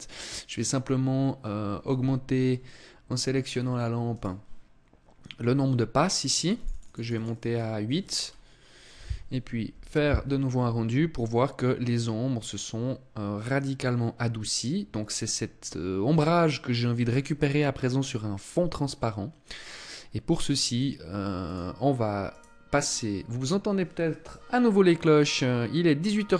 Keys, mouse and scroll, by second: 1.5 Escape, 2.8-3.2 scroll down 2, 3.5 right click, 5.9 click, 6.0 click, 6.2 click, 6.4 click, 6.6 click, 6.7 click, 6.9 click, 7.6-8.0 scroll up 2, 20.9 click, 21.7 right click.